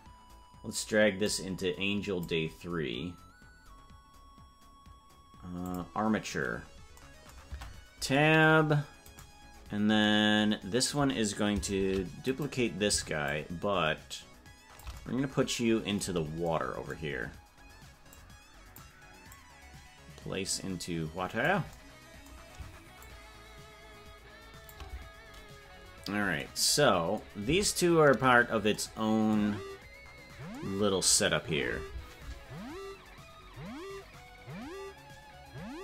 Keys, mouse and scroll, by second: 1.2-2.8 drag, 5.6 click, 7.5 Tab, 9.1 right click, 9.5-9.8 scroll down 5, 11.8 shift+d, 13.3-14.8 shift+drag, 18.1 click, 19.3-21.4 drag, 23.0-24.7 shift+drag, 28.0 Tab, 30.0 scroll up 4.